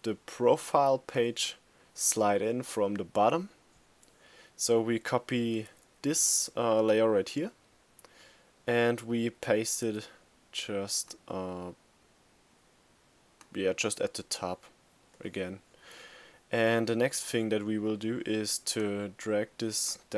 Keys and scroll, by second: 5.1 super+c, 9.4 super+v.